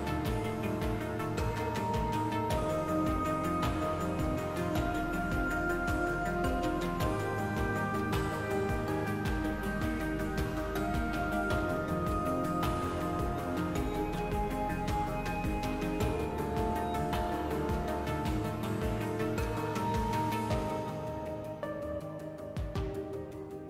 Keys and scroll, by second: 3.1 s, 7.0 2, 10.5 2, 11.8 3, 12.4 s, 16.4 s.